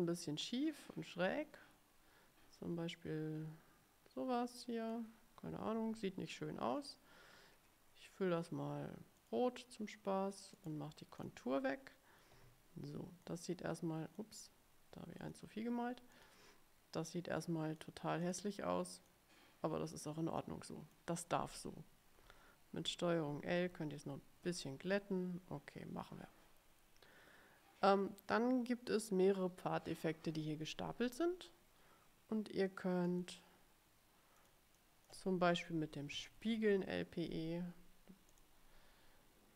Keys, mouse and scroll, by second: 0.1-5.2 drag, 9.3 click, 10.7 right click, 11.3 click, 13.4-14.5 drag, 15.3 click, 16.3 click, 17.1-18.1 drag, 18.3 click, 19.2-20.3 drag, 20.5 click, 23.3 ctrl+l, 23.7 ctrl+l, 24.2 ctrl+l, 33.2 click, 34.5 click, 34.9 click, 36.0-37.4 typing, 38.4 click.